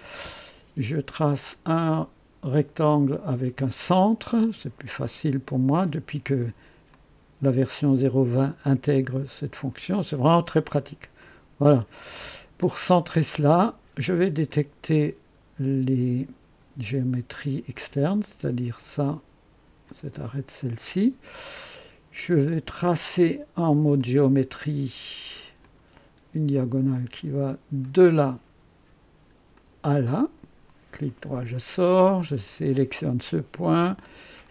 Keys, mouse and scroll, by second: 6.9 click, 9.2 click, 10.5 click, 11.2 right click, 11.8 scroll up 1, 14.4 click, 17.7 click, 19.8 click, 20.9 scroll up 1, 21.2 right click, 23.9 click, 25.6 click, 27.8 click, 29.5 click, 31.0 right click, 32.4 click, 34.4 click.